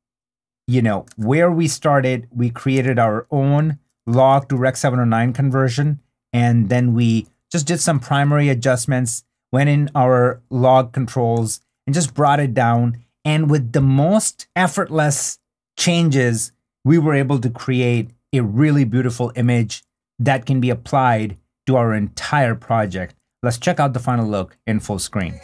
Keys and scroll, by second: 0.5 super+d, 1.4 super+d, 2.9 super+d, 6.8 super+d, 13.3 super+d, 17.6 \.